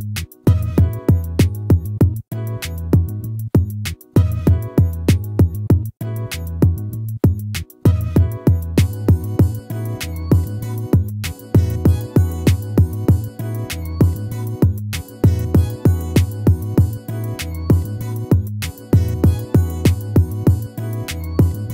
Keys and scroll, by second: 0.8 ctrl+-, 6.3 ctrl+z, 12.7 ctrl+-, 20.0 ctrl++.